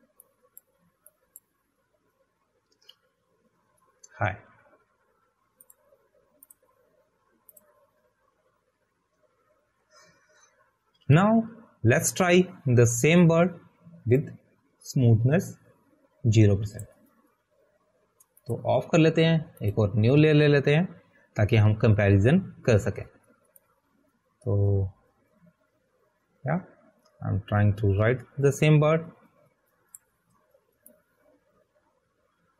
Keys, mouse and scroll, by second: 9.9 click, 20.1 click, 30.4 click.